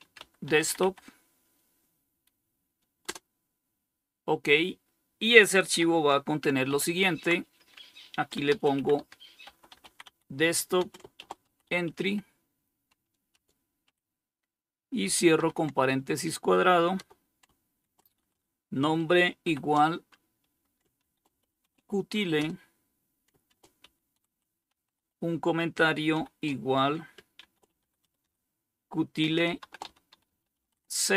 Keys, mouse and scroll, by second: 0.0-0.5 typing, 2.3 Return, 5.9 typing, 7.5-13.1 typing, 14.6 typing, 16.2-18.7 typing, 20.0-25.3 typing, 26.4-31.1 typing.